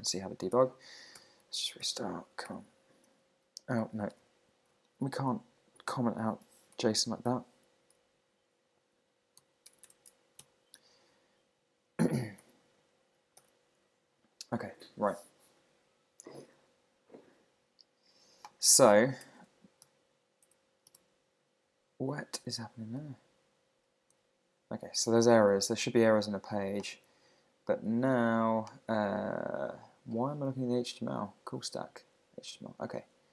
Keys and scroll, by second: 3.0 super+r, 4.1 super+Tab, 5.7 Down, 6.0 Up, 6.4 Home, 7.3 super+Left, 8.1 shift+super+Right, 9.4 super+x, 9.7 super+BackSpace, 10.4 super+s, 11.0 super+r, 11.4 super+Tab, 12.4 super+r, 25.5 super+`.